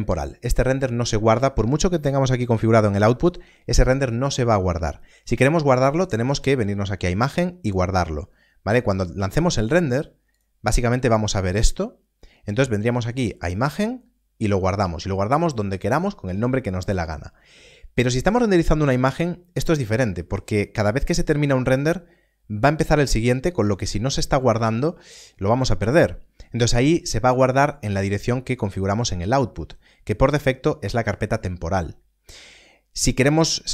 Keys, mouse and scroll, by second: 6.4 click, 10.2 click, 13.1 click, 27.8 click.